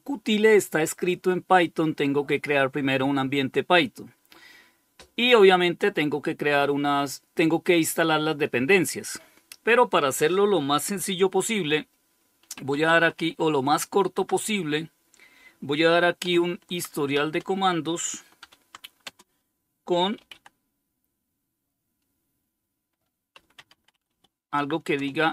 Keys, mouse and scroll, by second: 11.6-12.9 typing, 13.4 Tab, 15.4-16.3 typing, 17.6-20.0 typing, 22.3-23.8 typing, 24.2 Return.